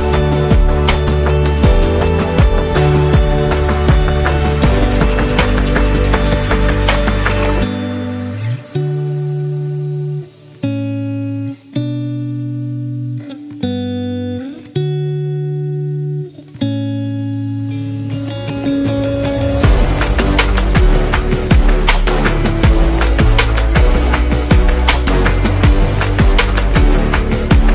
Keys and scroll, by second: 0.0-0.5 typing, 18.0 z, 18.9 v, 21.4 super+-, 23.5-24.7 typing.